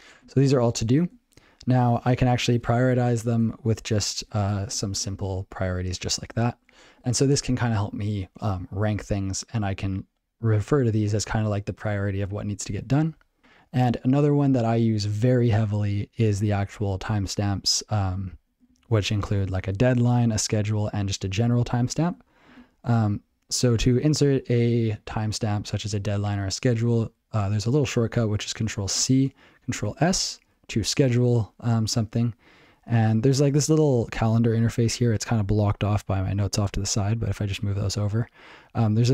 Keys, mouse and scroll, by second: 0.2 ctrl+g, 1.5 ctrl+p, 3.2 shift+Up, 4.2 shift+Up, 5.6 ctrl+g, 10.6 ctrl+p, 13.4 ctrl+c, 18.7 ctrl+n, 19.2 ctrl+alt+b, 19.6 ctrl+alt+f, 19.8 ctrl+alt+f, 20.5 ctrl+alt+f, 21.8 ctrl+n, 23.0 ctrl+p, 29.9 ctrl+s, 37.5 click.